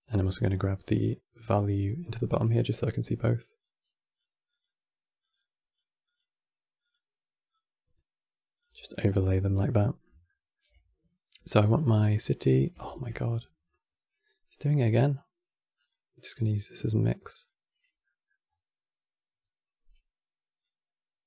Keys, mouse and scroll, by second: 1.1 click, 3.3-5.3 drag, 5.7-8.8 drag, 8.8-9.2 scroll up 3, 9.5-11.6 middle drag, 11.6-12.7 drag, 12.7 ctrl+z, 15.5-17.7 drag, 17.7 middle click, 18.1-20.3 scroll up 4, 20.3-21.2 drag.